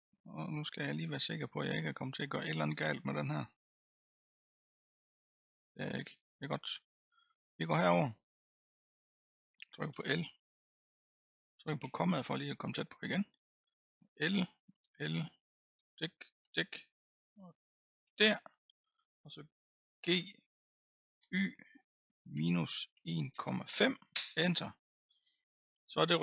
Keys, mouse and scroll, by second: 2.2 click, 2.9-3.8 scroll up 5, 3.8 middle click, 4.7-5.6 scroll up 1, 5.6 middle click, 6.1-7.4 scroll down 5, 7.4-9.9 middle drag, 9.9 l, 11.8 KP_Decimal, 13.0-14.2 middle drag, 14.2 l, 14.8 l, 15.7 l, 16.4 l, 18.0 l, 18.5-20.0 scroll down 4, 20.0 g, 25.0-26.2 scroll down 10.